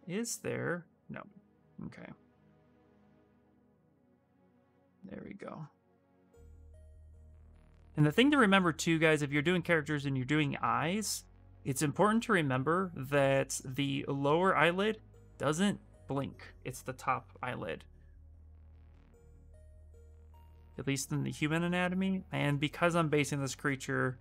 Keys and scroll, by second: 2.1 b, 14.8 s.